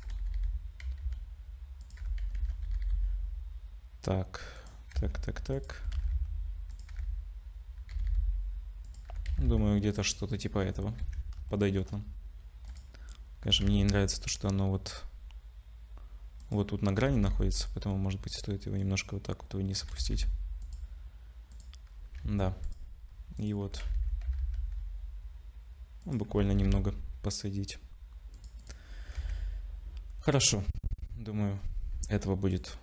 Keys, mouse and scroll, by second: 0.0 g, 2.0 g, 5.0 s, 5.8 g, 6.9 g, 10.3 click, 10.3 g, 10.6 scroll down 4, 11.1 ctrl+s, 11.5 shift+middle click, 12.0 scroll up 3, 12.7 click, 13.0 scroll up 1, 13.5 g, 17.0 g, 19.8 g, 21.5 click, 21.9 scroll down 4, 22.3 ctrl+s, 22.6 click, 23.0-23.4 scroll up 2, 23.4 click, 23.7 g, 26.3 g, 28.6 click, 28.9-29.2 scroll down 3, 29.2 ctrl+s, 30.6 z, 31.6 z, 32.1-32.6 scroll up 3, 32.6 click.